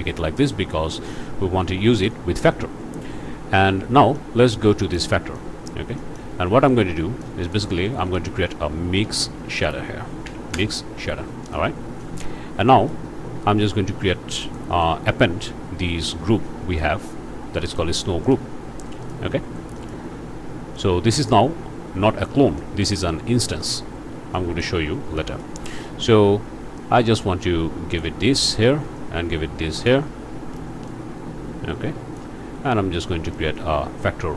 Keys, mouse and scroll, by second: 1.9 click, 2.8 scroll down 1, 3.7 scroll up 1, 4.1-5.1 drag, 5.3 click, 6.0 click, 6.7 click, 7.6 shift+click, 7.9 shift+a, 8.1 shift+click, 9.0 m, 9.2 i, 9.4 x, 10.2 Down, 10.5 Return, 11.7 scroll up 2, 12.3 scroll down 2, 14.8 shift+a, 19.0 click, 19.8 click, 20.8 click, 22.6 click, 23.6 click, 23.9 scroll down 1, 24.3 click, 25.2 click, 26.8-28.2 drag, 29.0-30.1 drag, 30.9-32.4 drag, 33.3-34.3 drag.